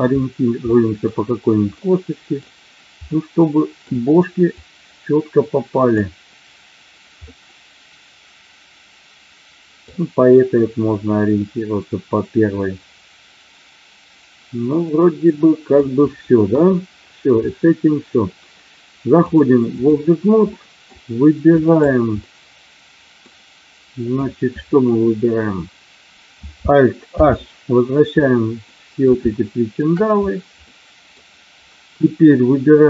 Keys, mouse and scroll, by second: 0.6 middle click, 0.6-1.0 scroll up 1, 1.9 middle click, 3.2 middle click, 4.5-5.9 drag, 7.4-9.9 middle drag, 11.4-15.6 middle drag, 16.4 KP_1, 19.3 click, 20.5 middle drag, 21.5 click, 22.1-23.2 middle drag, 27.1 alt+h, 28.7-29.7 middle drag, 30.6-31.1 middle drag.